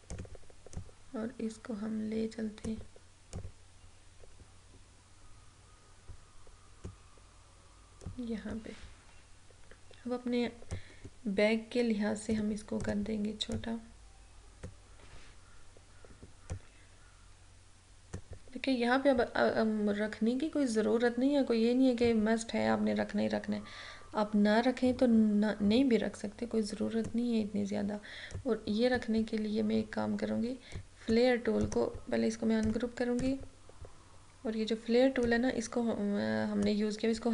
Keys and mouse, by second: 10.7-20.6 drag, 22.1-31.7 drag, 31.7 right click, 32.7-37.3 drag.